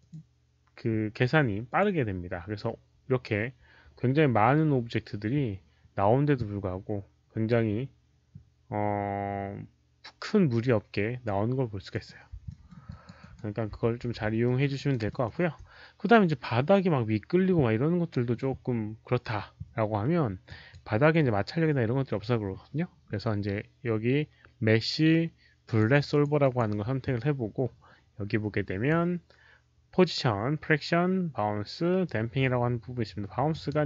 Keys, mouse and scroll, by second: 0.0 Return, 0.0 KP_0, 0.0 KP_5, 1.6 click, 11.8 click, 12.4 alt+middle click, 12.8 alt+click, 13.1 alt+right click, 14.4 alt+middle click, 14.7 alt+right click, 15.0 alt+middle click, 20.4 alt+click, 20.4 alt+middle click, 20.4 alt+right click, 20.4 q, 20.5 alt+middle click, 20.5 alt+right click, 20.5 q, 22.6 alt+middle click, 22.6 alt+right click, 22.6 q, 25.5 click, 25.7 alt+middle click, 26.0 click, 26.3 click, 28.3 click, 33.4 click.